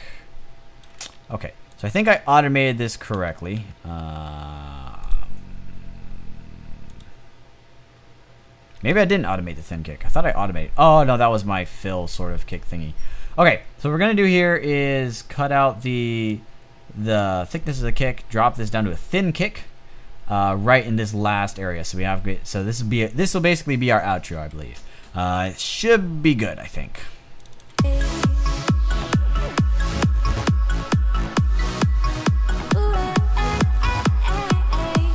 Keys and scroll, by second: 1.8 a, 3.0-3.4 typing, 6.6 typing, 8.6 a.